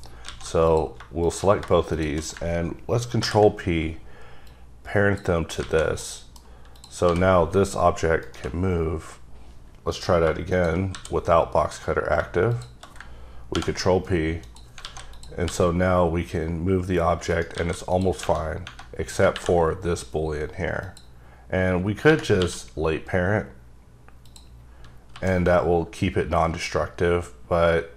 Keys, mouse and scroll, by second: 0.2 a, 0.6 click, 1.2 click, 1.9 shift+click, 3.2 p, 4.5 click, 5.6 alt+a, 6.0 middle click, 6.7 click, 7.1 g, 8.2 right click, 9.9 click, 10.9 w, 12.5 click, 13.5 ctrl+p, 14.4 click, 14.8 alt+a, 15.1 click, 15.4 g, 17.3 right click, 17.5 a, 17.9 click, 18.4 scroll up 2, 20.8 click, 22.4 q, 24.2 click, 24.6-25.1 scroll down 3, 25.1 g.